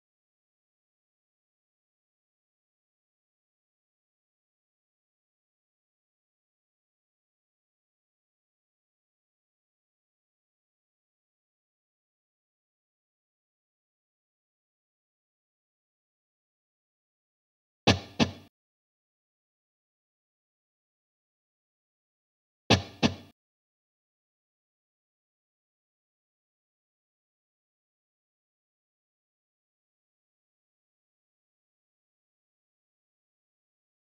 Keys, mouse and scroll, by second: 0.3 click, 9.9 click, 16.3 click, 21.3 click, 25.0 click, 30.1 click.